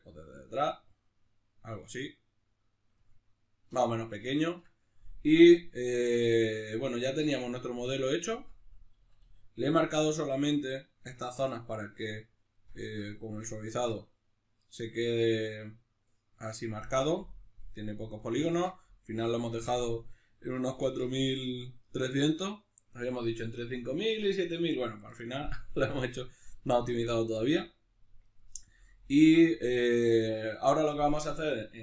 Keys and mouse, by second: 7.8 right click, 8.2 Tab, 9.7-31.8 middle drag, 12.8 Tab.